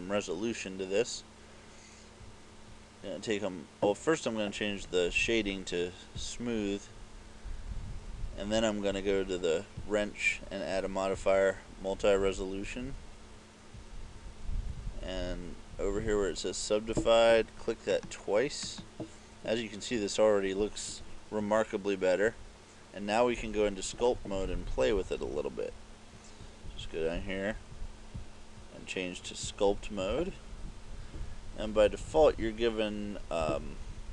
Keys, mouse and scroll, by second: 6.4 click, 31.9 KP_Add, 32.1 KP_Add, 32.4 KP_Add, 33.5 KP_Decimal.